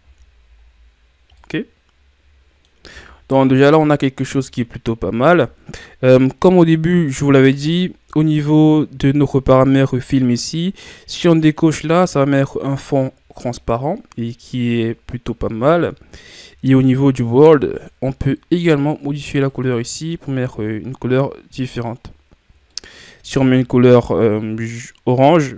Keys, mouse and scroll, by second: 0.6-1.3 scroll down 4, 1.3-11.5 middle drag, 11.5 click, 12.8-14.9 middle drag, 14.9-15.5 scroll up 3, 19.0 click, 20.8 scroll down 2, 21.1-25.5 middle drag.